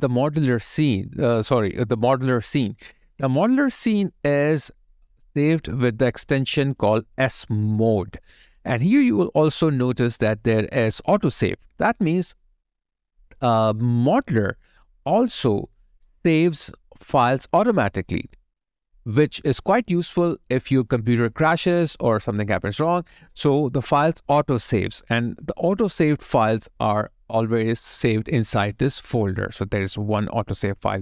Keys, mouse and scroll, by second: 27.7 double click.